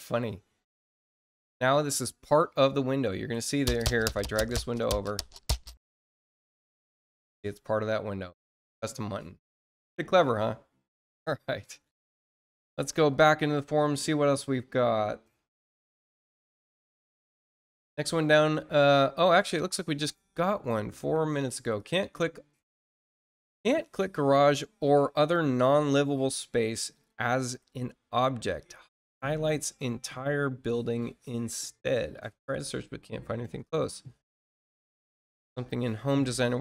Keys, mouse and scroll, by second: 3.3 click, 4.2 click, 15.4 click, 19.5-20.0 scroll down 2, 21.7 click, 36.4 click.